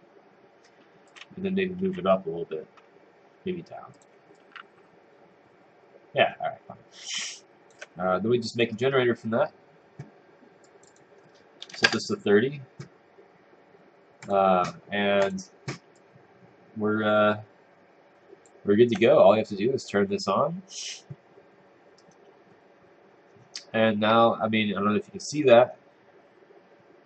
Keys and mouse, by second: 1.1 click, 1.5-2.3 typing, 3.9 click, 4.3 click, 11.9 Return, 16.1 click, 21.0 click.